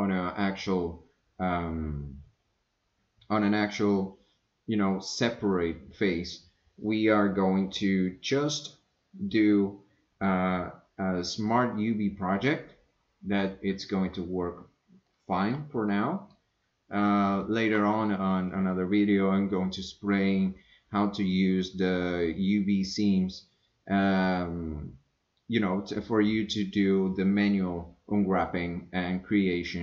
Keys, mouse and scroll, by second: 15.3 shift+middle click, 15.9 middle click, 17.7 shift+middle click.